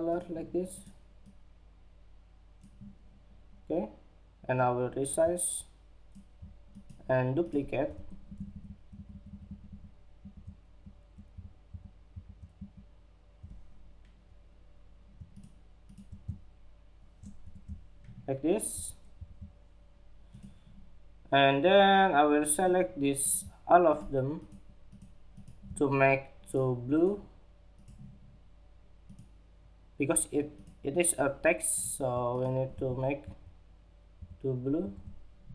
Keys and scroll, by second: 17.0 alt+shift+Down.